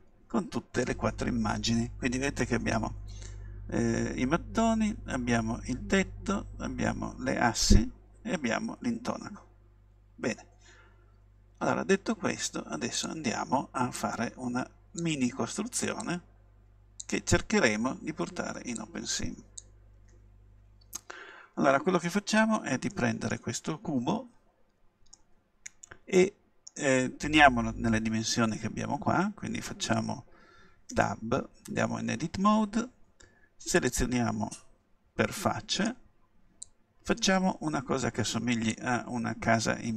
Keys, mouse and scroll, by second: 14.0-17.9 drag, 18.8-20.6 drag, 22.9-27.0 middle drag, 31.0 Tab, 33.8-35.7 drag, 35.7-37.6 right drag, 36.6-38.5 drag, 39.4 scroll up 1.